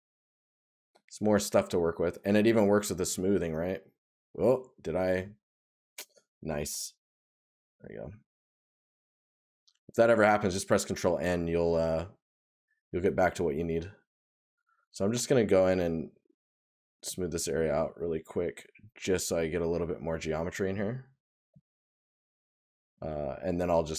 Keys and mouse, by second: 2.2 right click, 7.3 right click, 13.8 right click, 15.1 right click, 16.4 right click.